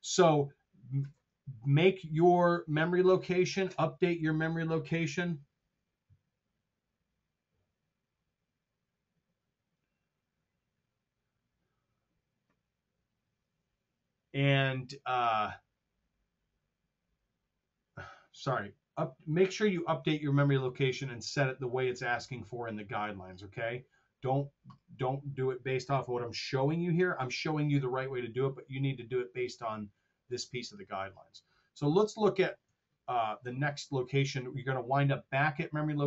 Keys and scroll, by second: 19.7 super+Tab, 32.6 super+Tab.